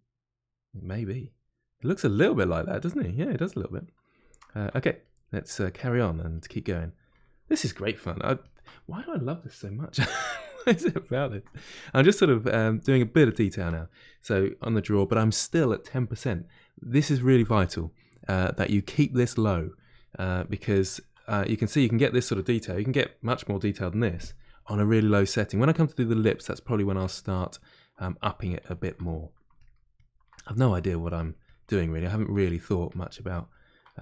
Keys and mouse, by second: 5.0-6.3 drag, 6.3 middle click, 7.1 ctrl+click, 7.7 middle click, 8.4 ctrl+click, 8.8-10.3 middle drag, 10.3-11.4 ctrl+drag, 11.4 middle click, 12.1-14.8 shift+drag, 14.8-28.0 middle drag, 28.0-29.0 ctrl+drag, 29.0 middle click, 29.5 ctrl+click, 30.3 middle click, 30.8 ctrl+click, 31.7 middle click, 32.2-33.8 ctrl+drag, 33.8-34.0 middle drag.